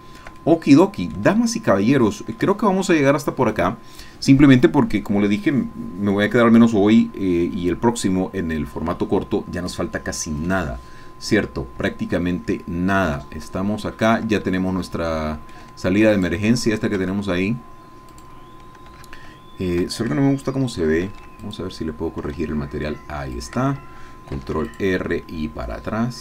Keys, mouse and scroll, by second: 12.3-13.0 scroll up 1, 13.3-14.3 shift+middle drag, 15.1 shift+middle click, 16.3 middle click, 17.0 Tab, 18.3 click, 21.0 ctrl+r, 21.4 ctrl+click, 23.5 click, 24.3 ctrl+r, 24.6 ctrl+click.